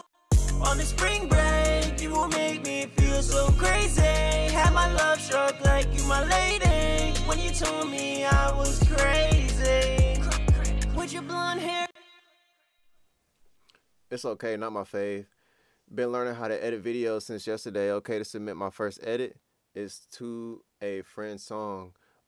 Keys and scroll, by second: 10.0-11.3 typing, 11.7 super+s.